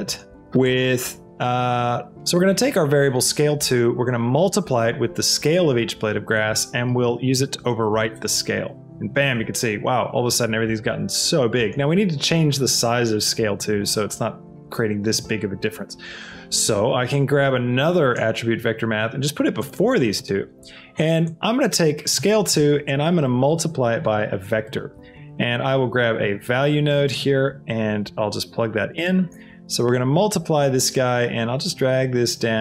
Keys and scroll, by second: 6.7 s, 7.1 l, 7.5 e, 8.2 Return, 18.9 shift+d, 25.4 shift+a, 26.2 v.